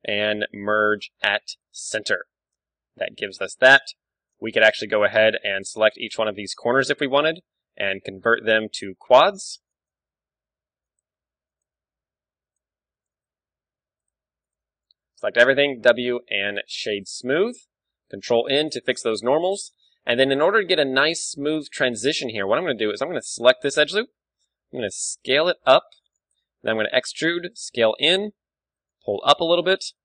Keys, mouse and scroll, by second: 2.6-5.5 middle drag, 4.5 ctrl+Tab, 6.1-17.0 right drag, 7.5 f, 10.1 f, 10.5 a, 11.9 f, 12.2 a, 13.3 f, 13.5 a, 14.8 f, 15.0 a, 15.2 a, 15.5 w, 18.5 ctrl+n, 18.8-22.0 middle drag, 19.0 Tab, 19.8 Tab, 20.8 KP_1, 21.6 ctrl+Tab, 22.5 z, 22.6 a, 23.4 right click, 23.7 z, 23.9-25.4 middle drag, 24.7 s, 26.2-27.5 drag, 27.1 e, 27.6 s, 28.1 right click, 29.0 g, 29.2-30.0 drag.